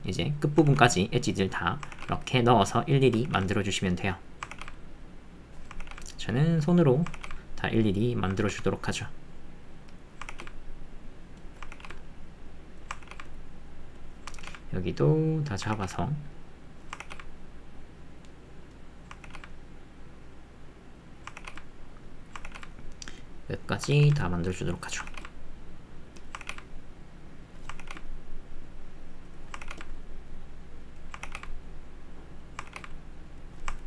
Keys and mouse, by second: 0.7 ctrl+r, 5.8 ctrl+r, 7.2 ctrl+r, 11.7-33.8 ctrl+r.